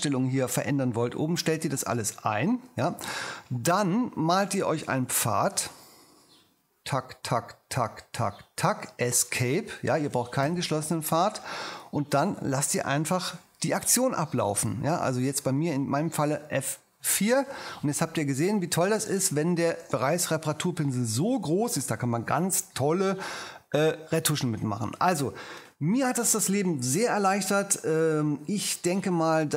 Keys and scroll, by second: 5.0 p, 9.4 ⟲, 16.2 F4, 20.1 j, 20.8 ctrl+alt+j.